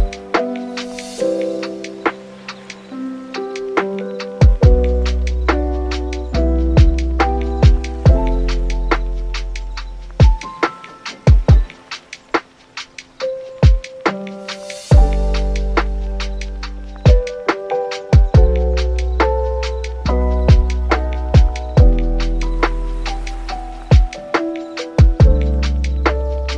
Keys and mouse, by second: 0.3 super+s, 0.4 middle click, 0.6 `, 1.1 n, 1.5 right click, 2.2-3.5 shift+middle drag, 4.0 n, 4.3 n, 4.6 right click, 5.2 n, 5.5 right click, 5.7 n, 6.0-8.1 middle drag, 8.7 n, 8.9 right click, 9.2 n, 9.7 super+s, 12.3-17.2 middle drag, 17.3 middle click, 17.8 super+s, 17.9 middle click, 18.1 shift+a, 20.0 click, 21.3 click, 21.9 click, 23.4 click, 24.5 super+s, 25.7 click, 26.4 shift+middle click.